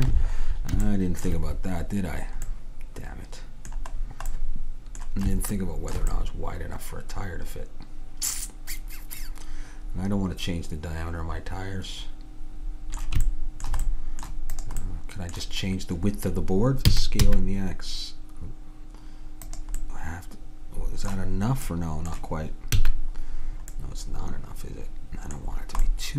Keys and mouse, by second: 6.2-8.6 middle drag, 13.3-16.9 middle drag, 14.6-16.4 drag, 16.9 s, 19.9-21.8 middle drag, 22.8 a, 25.0-26.1 middle drag.